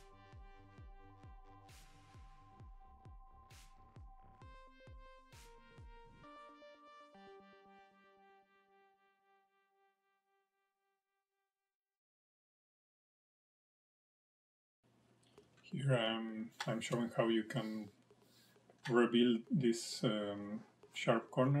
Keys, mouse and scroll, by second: 3.2 scroll down 2, 3.4 middle click, 3.8 shift+middle click, 4.1 click, 5.3 click, 5.5 scroll up 1, 5.7 shift+middle click, 6.3 click, 8.8 middle click, 9.1 scroll down 3, 9.3 middle click, 10.4 scroll down 1, 10.6 shift+middle click, 11.1 middle click, 11.9 middle click, 12.9-13.3 scroll up 1, 13.3 middle click, 13.7 shift+middle click, 17.4 click, 18.4 ctrl+click, 19.6 ctrl+click, 19.9 click, 20.2 ctrl+click.